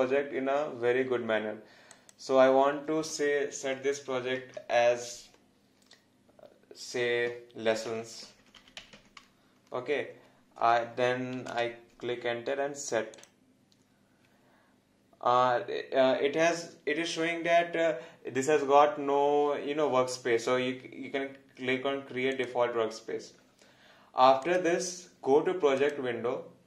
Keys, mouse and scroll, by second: 1.9 click, 7.7-9.5 typing, 11.5 Return, 13.2 click, 22.3 click.